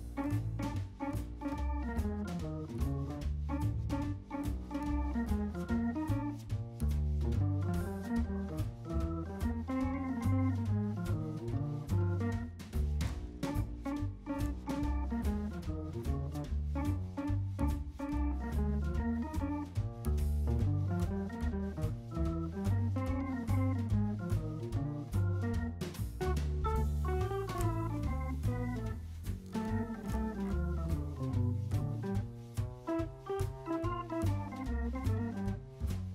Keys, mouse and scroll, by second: 1.0 middle click, 2.3 typing, 3.0-3.5 scroll up 1, 3.5 typing, 4.0 Escape, 4.2 scroll down 1, 4.3 middle click, 6.0 middle click, 6.5 shift+middle click, 8.3 middle click, 9.1-10.6 scroll down 1, 11.6 typing, 12.4-13.0 scroll up 1, 13.0 typing, 14.0-15.7 typing, 14.3 Return, 16.1 scroll down 1, 16.9 middle click, 17.8-18.7 typing, 19.2-19.7 scroll up 1, 19.9 middle click, 20.6 scroll down 1, 22.0 middle click, 22.3-22.6 scroll down 1, 26.8 middle click, 29.9 middle click, 31.1 c, 31.4 Escape, 31.7 Escape, 32.5 shift+click, 32.7 shift+double click, 34.3 typing, 35.4-35.9 scroll up 1, 35.9-36.1 scroll down 1.